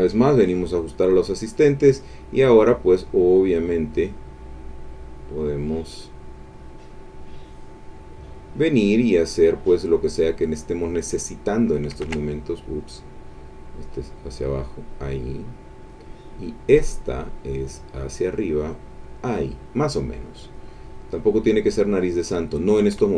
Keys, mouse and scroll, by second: 2.4-4.3 drag, 5.7-8.4 drag, 10.4-12.1 drag, 12.0 ctrl+z, 13.3-16.1 drag, 16.9-19.3 drag, 20.4 click, 22.0-23.1 drag.